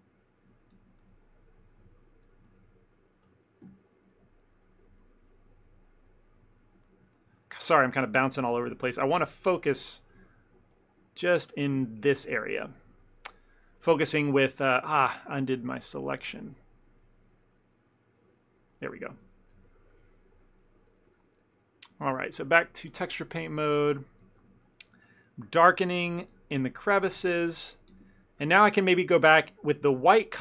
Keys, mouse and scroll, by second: 0.0 shift+middle click, 0.8 ctrl+click, 1.1 ctrl+click, 1.7 shift+middle click, 1.9 ctrl+middle click, 2.3 ctrl+click, 2.6 ctrl+click, 2.8 middle click, 3.7 KP_Decimal, 4.4 ctrl+middle click, 4.6 ctrl+middle click, 4.7 shift+middle click, 4.9 ctrl+middle click, 5.1 middle click, 5.4 middle click, 5.8-6.3 shift+middle click, 6.2 ctrl+middle click, 6.4 ctrl+middle click, 7.1 shift+middle click, 8.6 Tab, 9.4 alt+click, 10.8 click, 11.8 KP_Decimal, 12.5 ctrl+middle click, 12.9 Tab, 13.2 middle click, 15.4 ctrl+z, 16.3 ctrl+middle click, 16.6 ctrl+middle click, 17.7 ctrl+z, 18.3 ctrl+z, 18.8 ctrl+middle click, 19.3 Tab, 19.7 ctrl+middle click, 21.0 click, 23.0 click, 24.2 f, 24.7 ctrl+click, 25.0 ctrl+click, 25.6 ctrl+click, 26.2 ctrl+click, 26.4 ctrl+click, 26.7 middle click, 27.1 ctrl+click, 27.3 middle click, 27.9 f, 28.1 ctrl+middle click, 28.3 middle click, 29.0 click, 29.2 click, 29.5 f, 29.7 middle click, 30.3 click.